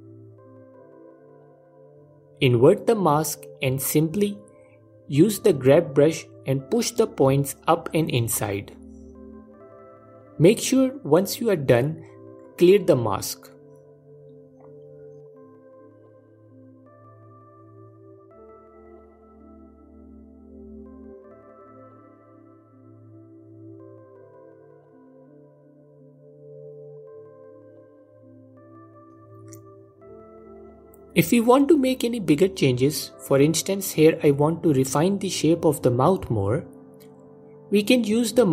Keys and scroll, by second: 2.1 g, 3.6 ctrl+i, 4.3 f, 10.9 alt+m, 12.6 f, 22.5 alt+q, 23.2 f, 29.6 alt+q, 32.6 F4.